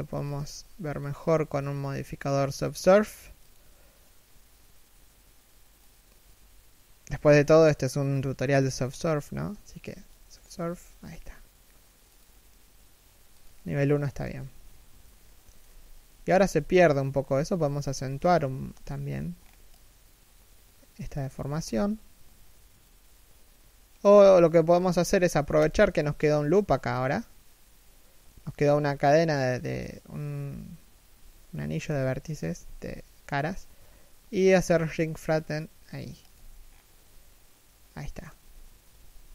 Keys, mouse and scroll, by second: 0.5 scroll up 1, 1.3-2.1 scroll down 1, 13.6-13.9 scroll up 1, 14.2 middle click, 15.2 KP_3, 15.8 KP_1, 16.0 z, 17.4 b, 18.4 b, 21.3 alt+s, 23.7 z, 25.2 alt+right click, 27.9 middle click, 28.2 z, 28.5 middle click, 30.7 1, 31.5 z, 32.2 alt+s, 36.2-36.7 scroll down 1, 36.7 middle click, 38.0 KP_3, 38.5 KP_1, 39.1-39.3 scroll up 1.